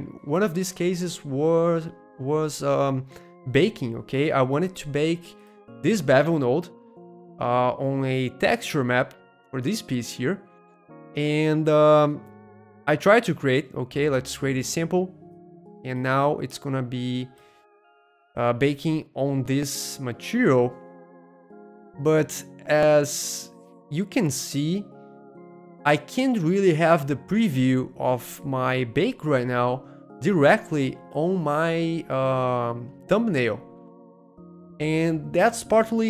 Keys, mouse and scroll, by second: 3.7-6.9 middle drag, 5.3 click, 7.2-8.8 shift+middle drag, 8.9-10.8 middle drag, 10.9-14.4 middle drag, 14.5-15.9 middle drag, 16.4-19.5 middle drag, 20.0-21.4 middle drag, 25.4-27.4 middle drag, 30.0-31.4 middle drag, 33.6 middle click.